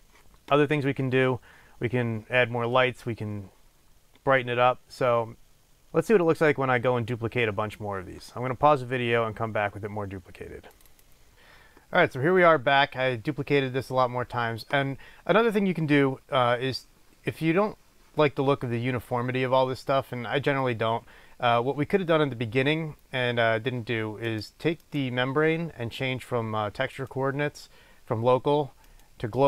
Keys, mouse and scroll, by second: 0.0-11.3 drag, 24.4 click, 24.9 click, 27.0-29.4 drag.